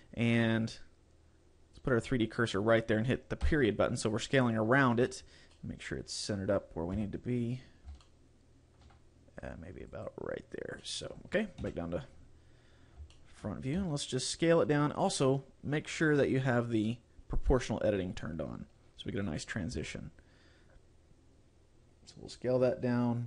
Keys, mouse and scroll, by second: 1.9 click, 3.5 ., 5.6 middle click, 7.0 KP_7, 7.8 scroll down 2, 8.1 shift+middle click, 8.9 shift+scroll down 1, 9.9 click, 10.9 middle click, 11.7 KP_1, 12.4-12.8 scroll up 3, 13.1 shift+scroll down 1, 13.2 shift+middle click, 13.9 s, 15.3 right click, 16.2 click, 21.0 s.